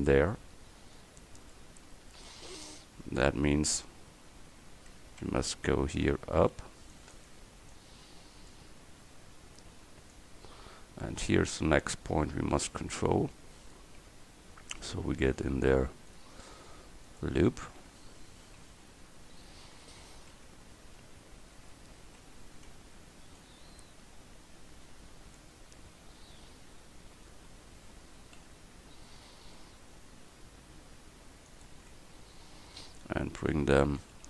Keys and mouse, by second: 3.1 Tab, 5.3 Tab, 5.8 Tab, 6.2 a, 6.7 c, 9.1 Tab, 14.1 Tab, 15.4 ctrl+r, 18.7 KP_3, 19.3 KP_1, 21.6 Tab, 22.2 Tab, 22.8 Tab, 28.5 g, 32.0 Tab, 33.9 a.